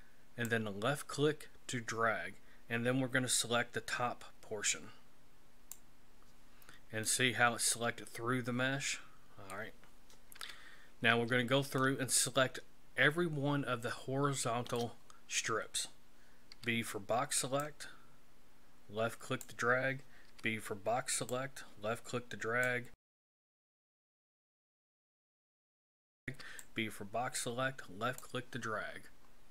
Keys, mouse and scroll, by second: 7.0 scroll up 1, 7.0 middle click, 10.3 KP_1, 11.7 shift+middle click, 16.5 b, 20.3 b, 23.1 b, 23.8 shift+middle click, 24.4 b, 24.7 b, 25.6 b, 26.3 b, 29.2-29.5 scroll down 5.